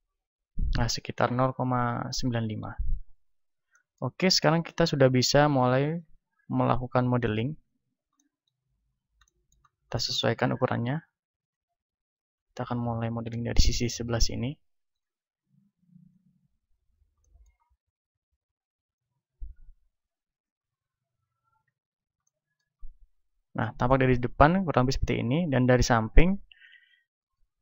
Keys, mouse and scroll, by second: 2.7 n, 4.3-5.4 middle drag, 5.4-7.5 drag, 7.6-10.5 middle drag, 10.5 s, 11.5-14.4 drag, 14.4 s, 14.9-17.3 drag, 17.3-20.2 middle drag, 20.6-23.5 drag, 22.8-27.1 middle drag, 26.2 a, 27.1-27.6 right drag.